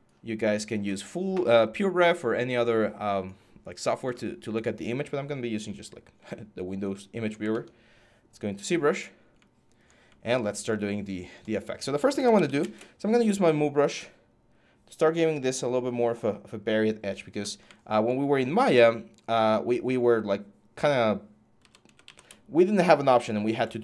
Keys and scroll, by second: 7.3 alt+Tab, 11.7-12.7 typing, 21.1-23.8 typing.